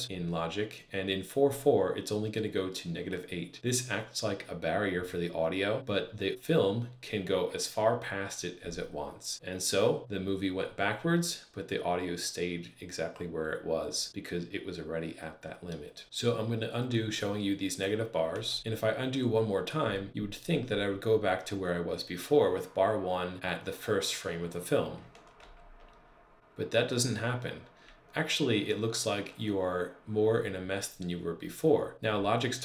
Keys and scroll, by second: 18.2 super+z, 25.2 super+z.